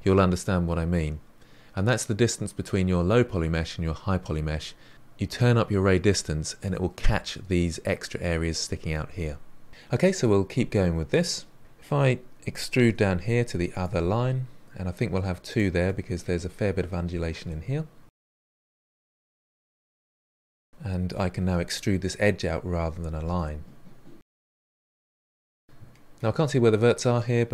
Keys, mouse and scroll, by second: 9.2-9.7 scroll down 4, 9.7 middle click, 11.6 click, 12.8 e, 13.9 e, 15.8-17.0 middle drag, 17.0 click, 17.2-18.2 middle drag, 18.3-21.8 typing, 19.4 middle click, 20.3 middle click, 21.2 middle click, 22.3-23.3 middle drag, 24.8 click, 25.5 middle click, 26.3-27.5 typing, 27.1 middle click.